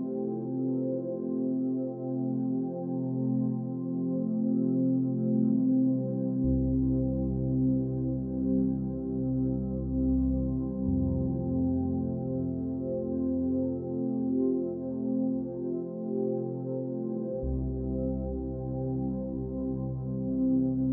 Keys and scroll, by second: 7.6 Down, 11.6 ctrl+-, 14.1 Left, 14.2 Up, 14.4 Left, 14.5 Up, 15.0 Left, 16.1 Down, 16.2 Right, 16.3 Down, 16.5 Right, 17.1 Down, 18.8 Right.